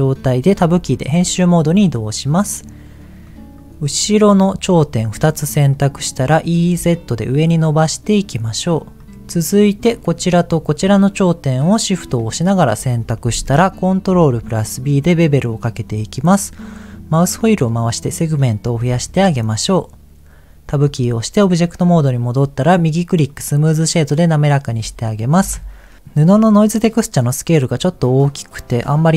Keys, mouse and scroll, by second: 0.5 Tab, 3.2 click, 3.7 scroll down 1, 4.3 shift+click, 5.4 middle click, 6.2 e, 6.7 z, 8.2 click, 8.9 middle click, 9.1 click, 9.8 click, 10.5 shift+click, 11.2 middle click, 12.2 shift+middle click, 14.0 ctrl+b, 15.8-17.0 scroll up 5, 17.0-17.4 scroll up 1, 18.8-19.9 drag, 20.8 Tab, 22.6-23.7 right drag, 24.4 middle click, 25.4 KP_0, 26.5 click.